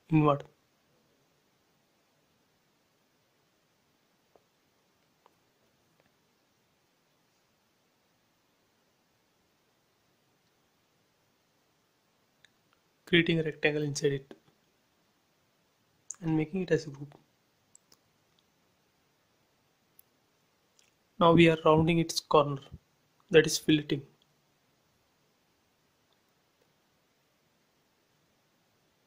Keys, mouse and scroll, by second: 0.0 click, 0.7 t, 1.7 click, 1.8 click, 3.0 1, 3.5 shift+', 3.7 Return, 4.0 space, 4.5-5.0 scroll up 1, 5.1 t, 5.8 click, 7.3-7.8 typing, 8.1 Return, 9.5 click, 11.2-13.3 typing, 12.1 Return, 13.0 scroll up 1, 13.8 click, 14.9 space, 15.2 click, 15.6 right click, 16.3 click, 18.4 t, 19.0 click, 20.6-21.1 typing, 21.4 Return, 22.7 click, 24.3-25.5 typing, 25.1 Return, 26.0 click, 27.0 shift+x, 27.7 scroll up 1, 28.1 a, 28.6 click.